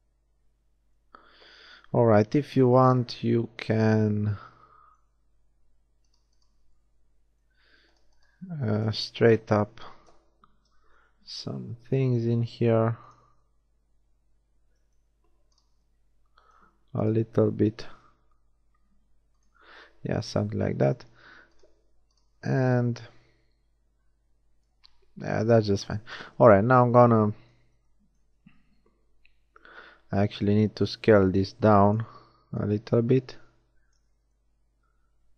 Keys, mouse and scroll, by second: 1.9 KP_3, 3.5 middle click, 4.5 middle click, 4.9 middle click, 6.1 shift+middle click, 8.8 KP_1, 10.0 KP_3, 10.5 s, 15.5 middle click, 17.8 shift+s, 19.5 a, 21.5-23.6 middle drag, 26.2 KP_1, 29.3 z, 30.1 s, 31.6 click, 32.5-34.5 drag, 34.1 z.